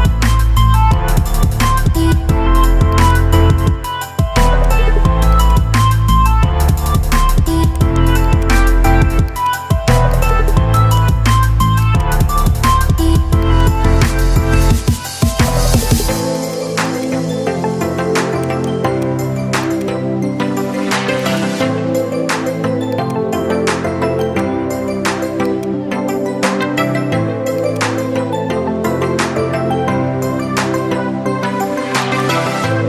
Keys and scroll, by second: 30.8 ctrl+v.